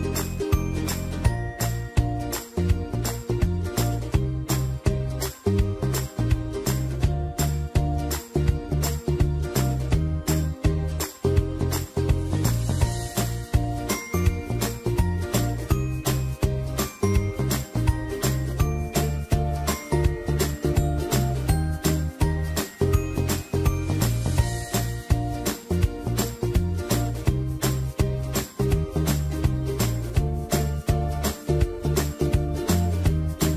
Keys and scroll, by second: 2.5 ctrl+a, 5.1 t, 6.0 ctrl+a, 16.9 ctrl+a, 17.5-19.1 typing.